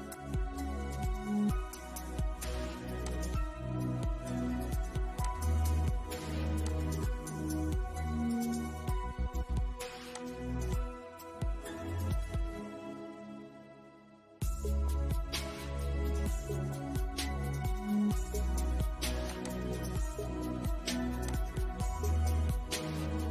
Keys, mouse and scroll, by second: 0.5-2.3 shift+middle drag, 2.3 click, 2.9 scroll up 1, 4.4 click, 4.9 middle click, 5.8 click, 7.1 scroll down 1, 7.4-9.3 middle drag, 9.3-18.5 drag.